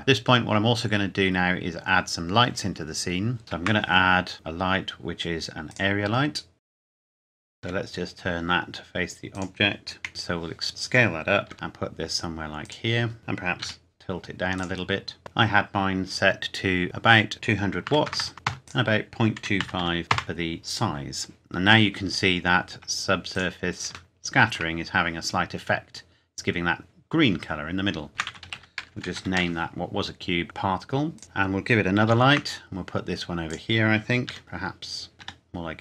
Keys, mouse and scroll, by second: 0.0-1.0 scroll down 1, 1.0 scroll up 1, 2.0 scroll down 1, 3.4 shift+a, 5.7 click, 6.3 scroll down 1, 6.5-7.6 typing, 6.8 KP_Enter, 6.9 scroll down 1, 7.2 click, 9.3 click, 10.0 KP_1, 10.7 click, 11.5 g, 12.6 click, 13.2 KP_3, 13.6 r, 14.6 click, 17.3 click, 17.8 KP_2, 18.0 KP_0, 18.5 KP_Enter, 19.3 click, 19.4 KP_Decimal, 19.6 KP_2, 19.8 KP_5, 20.1 KP_Enter, 22.3-22.9 scroll up 1, 22.9 scroll down 1, 23.3 click, 24.1 shift+middle click, 27.8-28.1 scroll down 1, 28.1-29.2 typing, 29.4 Return, 31.2 click, 31.7 KP_7, 32.1 shift+d, 33.5 click, 34.2 r, 34.4 click, 34.5 scroll down 1, 35.1 scroll up 1, 35.2 g.